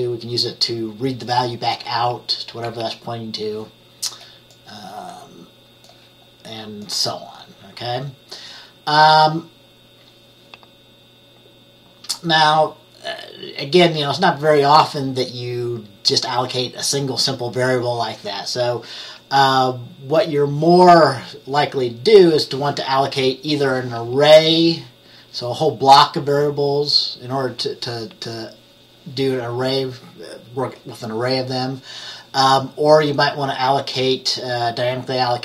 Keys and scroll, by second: 2.8 F10.